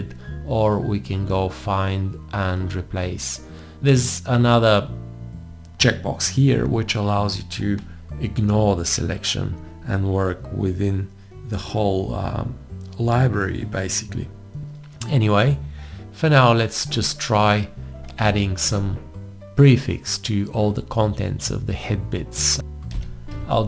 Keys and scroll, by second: 22.7-23.6 typing.